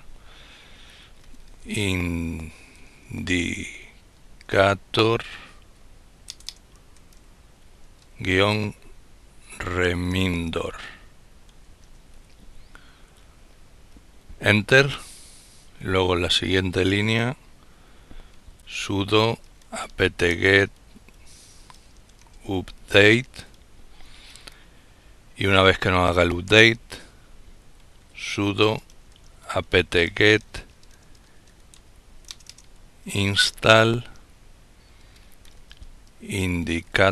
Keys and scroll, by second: 0.2-11.4 typing, 17.2-22.8 typing, 26.4-33.0 typing, 34.3-37.1 typing.